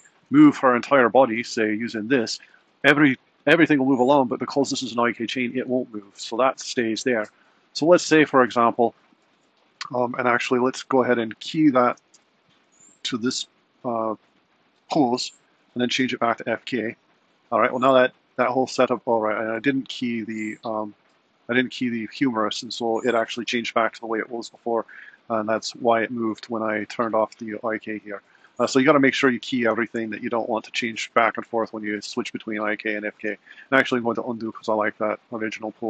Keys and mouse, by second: 1.1 click, 5.1 g, 10.4 click, 11.9 i, 15.9 click, 21.1 click, 33.6 super+z, 33.9 super+z, 34.4 super+z, 35.2 super+z, 35.5 super+z.